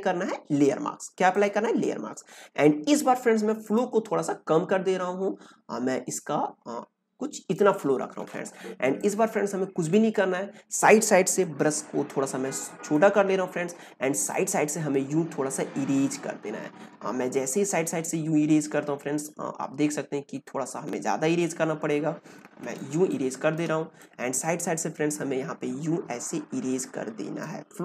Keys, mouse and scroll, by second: 1.3 click, 3.7-8.8 drag, 8.8 ctrl+space, 8.9 ctrl+click, 9.3 ctrl+space, 9.4 ctrl+space, 11.4-14.2 alt+right drag, 14.2-22.7 drag, 22.7 space, 23.0 click, 23.2 space, 23.9-27.8 drag.